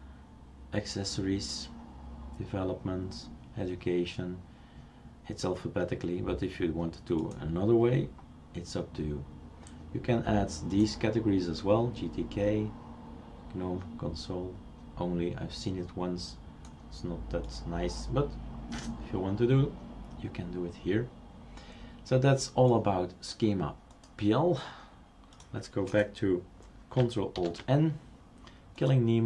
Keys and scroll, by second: 27.4 ctrl+alt+n.